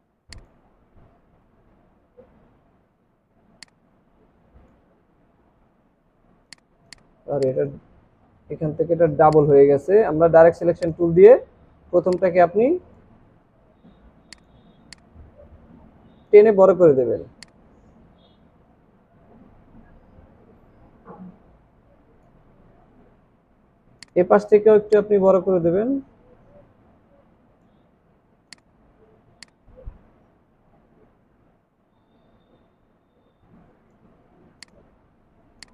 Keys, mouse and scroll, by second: 1.4 ctrl+z, 13.3 ctrl+z, 22.5 scroll down 1, 35.1 alt+scroll down 1, 35.5 space.